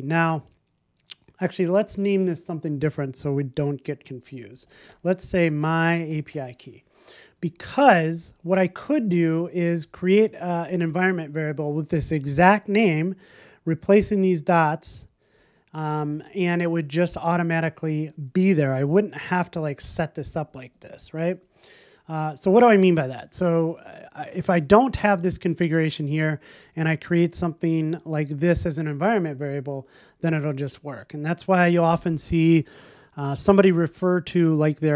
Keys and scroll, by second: 0.1 alt+shift+Left, 1.9 alt+shift+Right, 2.0 alt+shift+Left, 8.1 alt+shift+Left, 26.9 alt+shift+Right.